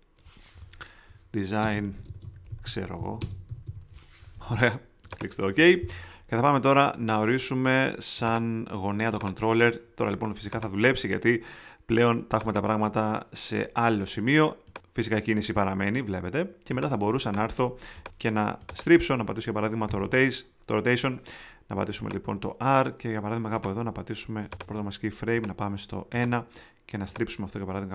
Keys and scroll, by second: 1.6-4.1 typing, 19.8 ρ.